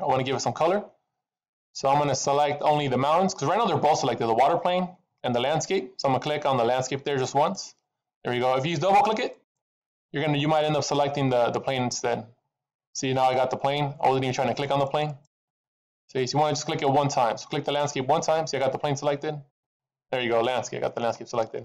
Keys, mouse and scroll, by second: 0.0-1.8 scroll down 1, 1.8-2.5 scroll down 1, 3.3 middle click, 7.3 click, 9.3 click, 9.4 click, 11.6 click, 11.9 click, 14.5 click, 14.7 click, 15.0 click, 15.2 click, 15.5 click, 15.7 click, 15.9 click, 16.3 click, 19.4 click.